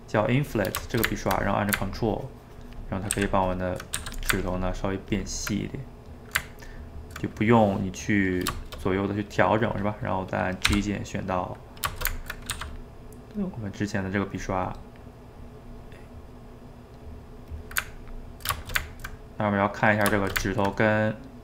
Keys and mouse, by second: 0.2 click, 0.9-2.0 ctrl+shift+middle drag, 2.0-3.2 ctrl+drag, 3.2 ctrl+z, 3.5 ctrl+click, 4.0 f, 4.4-5.6 ctrl+drag, 5.6-6.7 middle drag, 6.7 ctrl+click, 7.3-10.7 middle drag, 10.7 g, 11.1-12.5 middle drag, 12.5 f, 12.9 middle click, 13.4-15.8 drag, 15.8-17.0 middle drag, 17.0 click, 17.9-21.4 ctrl+middle drag.